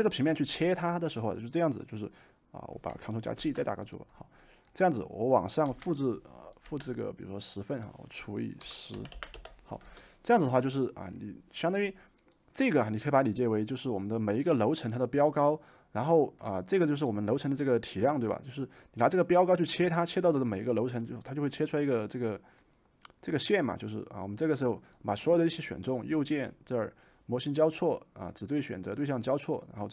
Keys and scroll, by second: 3.3 ctrl+g, 5.7 m, 8.3-10.5 typing, 13.2-15.3 typing.